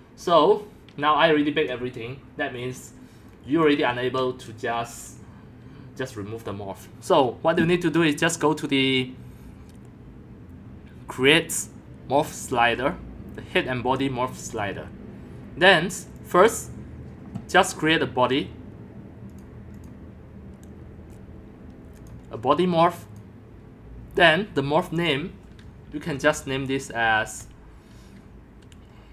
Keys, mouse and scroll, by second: 0.0-29.1 typing, 0.2 click, 1.0-1.8 drag, 3.2 drag, 3.6-13.4 drag, 14.5-17.7 drag, 19.8 click, 22.4-29.1 drag.